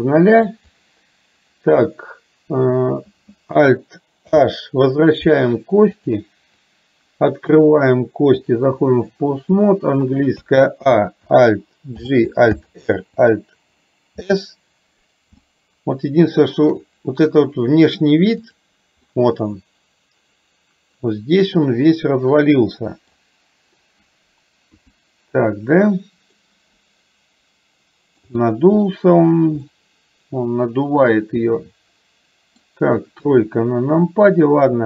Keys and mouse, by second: 4.3 alt+h, 5.9 click, 7.7-8.7 drag, 16.4-16.8 shift+middle drag, 18.4 click, 19.2-23.2 middle drag, 24.7 KP_2, 26.4-28.3 middle drag, 29.8-32.7 middle drag, 33.3 KP_3.